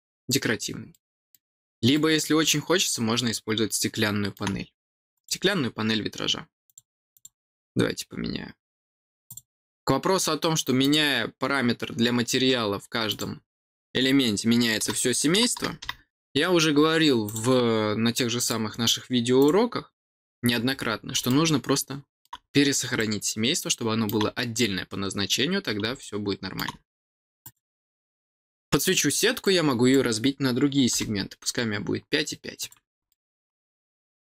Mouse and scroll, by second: 0.5 scroll up 1, 0.8 middle click, 1.5 middle click, 1.9 middle click, 2.4-4.3 middle drag, 5.1 click, 6.6 click, 7.1 click, 9.2 click, 10.7 click, 13.0 click, 17.2 click, 18.3 click, 19.3 click, 21.2 middle click, 22.9-24.0 middle drag, 25.1-25.6 scroll down 2, 25.9 middle click, 27.4 click, 29.4 click, 32.5 click, 33.0-34.3 middle drag.